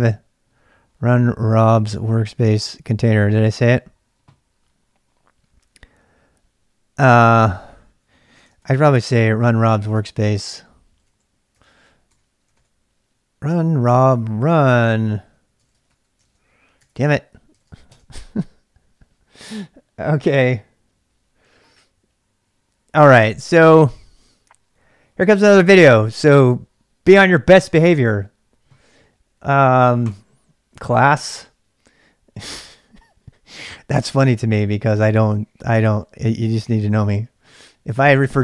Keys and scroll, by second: 8.6 ctrl+c, 8.9 ctrl+[, 9.0-17.6 typing, 9.9 ctrl+[, 17.9 Return.